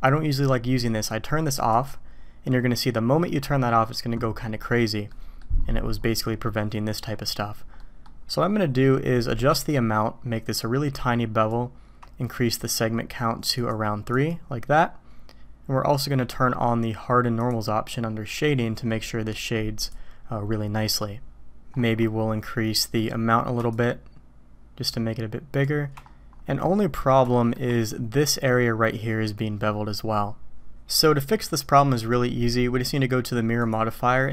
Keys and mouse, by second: 1.7 click, 5.1-5.4 drag, 7.8 drag, 9.7 shift+click, 10.5 shift+middle click, 14.1 click, 17.4 click, 19.8 click, 23.0 middle click, 23.8-25.7 shift+drag, 26.6-27.0 drag, 27.3 shift+middle drag, 33.7 click.